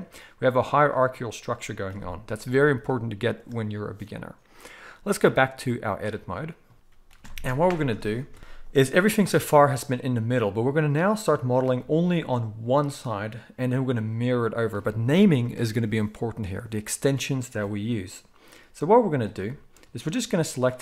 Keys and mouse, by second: 0.7 click, 0.8-5.2 middle drag, 1.8 g, 5.2-19.1 drag, 7.0 KP_1, 19.1-20.8 shift+middle drag.